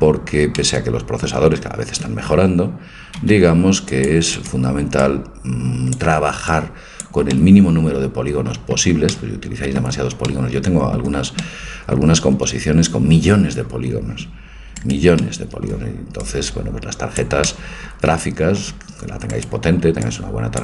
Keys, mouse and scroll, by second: 0.6 middle click, 1.7 a, 3.2 c, 5.1-7.3 drag, 7.3-10.5 middle drag, 12.2 a, 14.8 scroll down 1, 15.0-16.5 right drag, 15.4-17.2 middle drag, 16.3-18.2 drag, 17.6 middle click, 19.3-20.6 right drag, 20.1-20.6 drag.